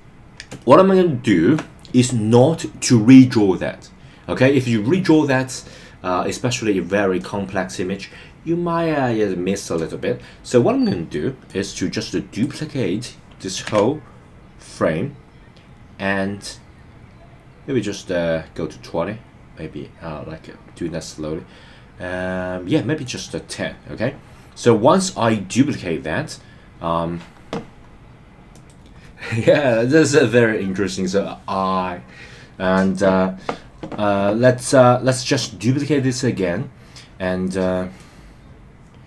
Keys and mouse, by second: 0.6-1.6 shift+middle drag, 11.4 click, 11.6 click, 13.6 shift+d, 23.0 click, 38.1-39.0 drag.